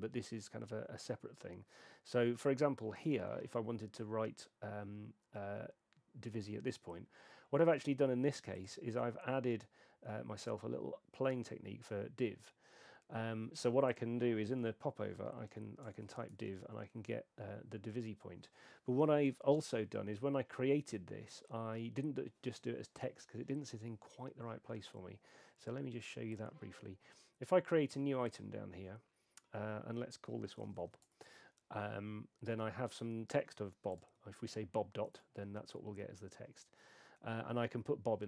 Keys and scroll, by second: 15.2-16.6 typing, 30.5-31.3 typing, 34.1 •, 35.1 Tab.